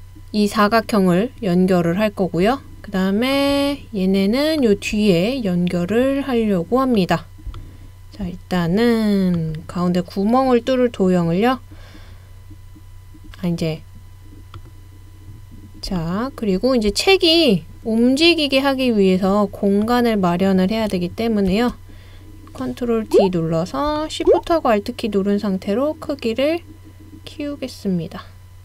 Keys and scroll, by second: 21.5 super+d.